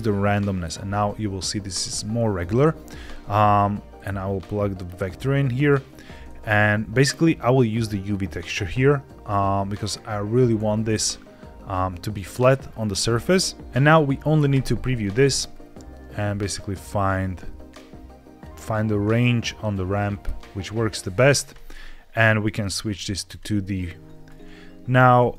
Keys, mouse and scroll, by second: 3.8 click, 7.6 click, 14.4 ctrl+shift+click, 15.4 click, 16.7-17.7 drag, 18.0 click, 18.6-20.9 drag, 22.3-23.3 drag.